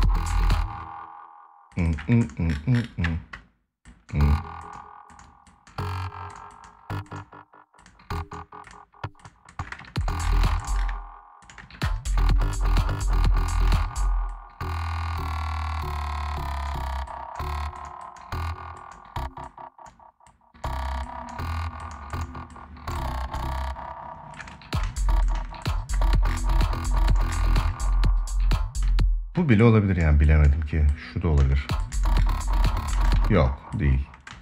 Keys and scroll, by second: 0.0 space, 9.4 space, 10.1 space, 11.2 space, 11.8 ctrl+s, 13.4 space, 24.1 space, 28.5 space, 31.1 space, 32.6 space, 32.9 ctrl+z, 34.0 space.